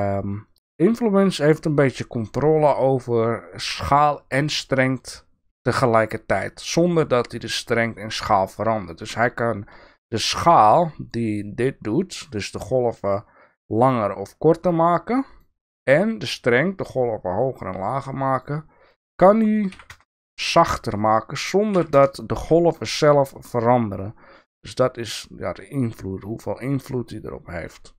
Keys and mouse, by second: 12.1-14.0 drag.